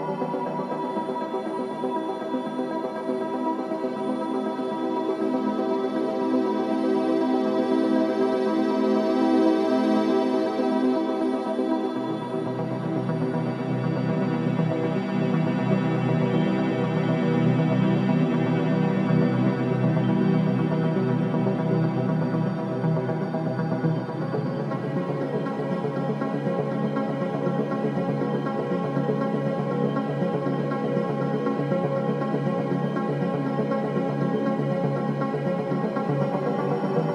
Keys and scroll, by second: 15.6 BackSpace, 15.9 Return.